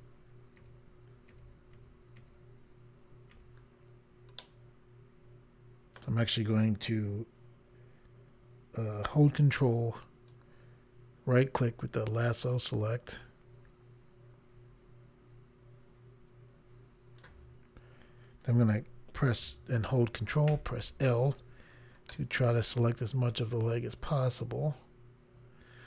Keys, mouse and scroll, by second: 4.4 middle click, 10.3 ctrl+right click, 20.5 ctrl+l, 22.1 middle click.